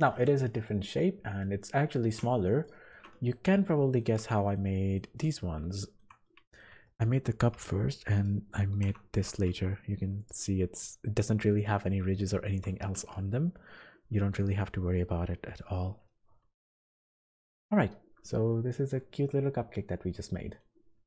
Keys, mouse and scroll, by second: 0.6 middle click, 1.4 middle click, 2.0 e, 2.1 click, 2.6 click, 2.9 middle click, 3.6 shift+middle click, 4.0 shift+middle click, 4.1 middle click, 4.6 middle click, 5.2 click, 5.7 shift+middle click, 6.2 middle click, 6.8 shift+middle click, 7.6-8.2 scroll up 3, 8.1 click, 9.2 g, 12.5 shift+middle click, 13.6 ctrl+z, 14.3-15.1 scroll down 10, 17.2 shift+middle click, 17.3-18.4 scroll up 9, 19.1 shift+middle click.